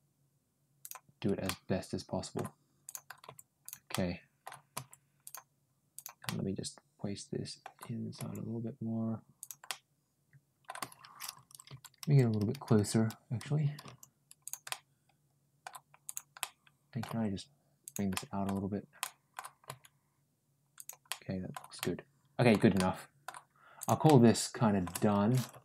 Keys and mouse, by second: 1.3 middle click, 2.7 click, 3.5 g, 3.7 middle click, 4.6 g, 5.8 click, 6.1-7.4 middle drag, 9.2 g, 9.5-10.5 middle drag, 14.5 shift+middle click, 15.9 click, 16.2 middle click, 16.9 g, 18.0 middle click, 18.8 middle click, 19.5 g, 20.9 middle click, 21.6 middle click, 22.6 middle click, 23.6 click, 23.9 middle click.